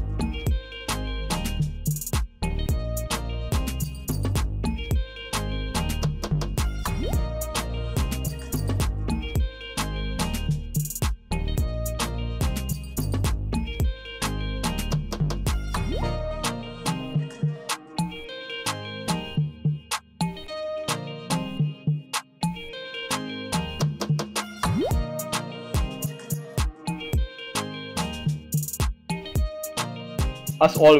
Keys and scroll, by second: 0.4 Right, 1.9 w, 3.0 w, 4.5 w, 5.6 w, 11.4 Tab, 13.4 l, 14.7 l, 16.0 l, 18.0 Return, 21.1 BackSpace, 22.5 Return, 24.5 l, 26.4 Return, 28.3 BackSpace, 29.6 Return.